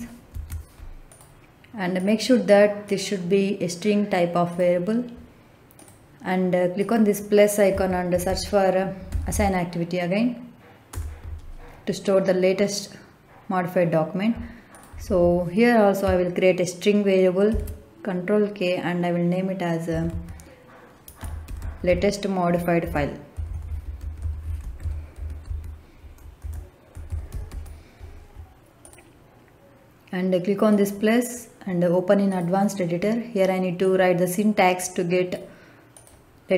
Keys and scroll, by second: 0.2 ctrl+v, 7.6 a, 8.0 s, 9.0 i, 10.9 Return, 17.4 ctrl+k, 19.8 l, 20.0 a, 21.1-27.4 typing.